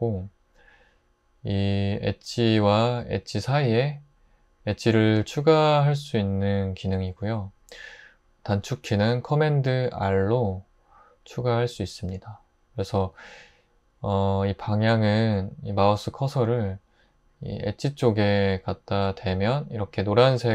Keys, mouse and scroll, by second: 10.1 super+r.